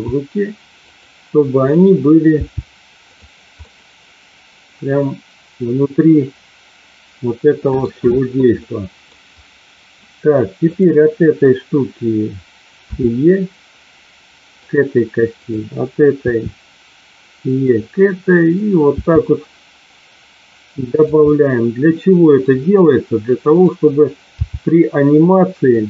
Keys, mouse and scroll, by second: 0.7 click, 2.3 g, 3.0 click, 3.6-7.8 middle drag, 8.6 middle click, 12.8 e, 14.5 click, 15.3 click, 16.2 e, 17.6 click, 18.3 click, 20.8 click, 20.8 e, 21.2-22.3 middle drag, 23.5 click, 24.3 g, 25.7 click.